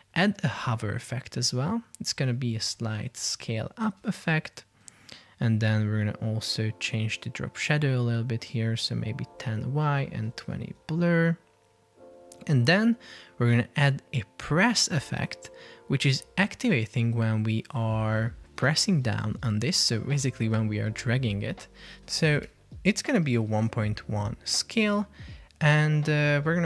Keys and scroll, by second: 3.5 BackSpace, 4.1 Return, 10.6 Return, 19.8 BackSpace.